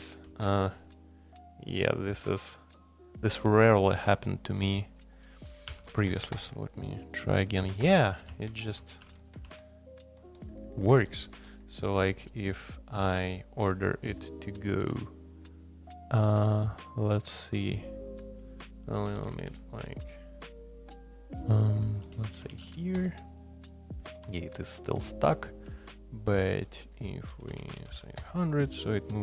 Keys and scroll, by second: 0.2 i, 5.7 a, 6.1 alt+p, 6.3 Return, 7.6 alt+p, 7.8 Return, 8.2-15.3 typing, 18.6-19.7 typing, 21.8-28.4 typing.